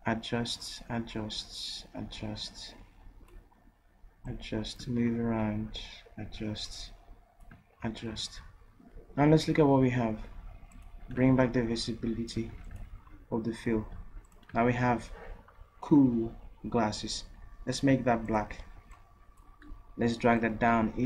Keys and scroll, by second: 12.4 v.